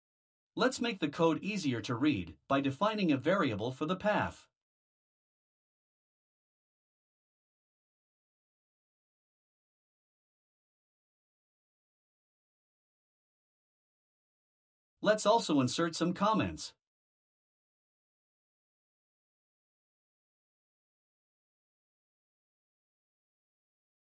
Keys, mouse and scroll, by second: 0.2 Return, 0.5-2.1 typing, 3.7 click, 3.9 click, 7.1 ctrl+c, 7.6 click, 8.0 ctrl+v, 10.6 click, 11.9-13.8 typing, 14.0 click, 14.4 Return, 15.1 ctrl+alt+3, 16.0-19.7 typing, 21.1 click, 21.4 Return, 21.9-24.0 typing.